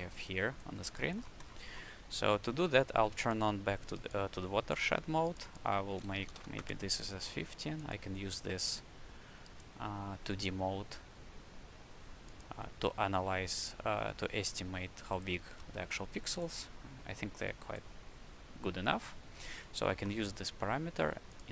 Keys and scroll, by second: 0.0 q, 6.2 KP_1, 6.2 KP_5, 6.5 KP_Enter, 15.3 w, 18.8 q, 19.4 shift+c.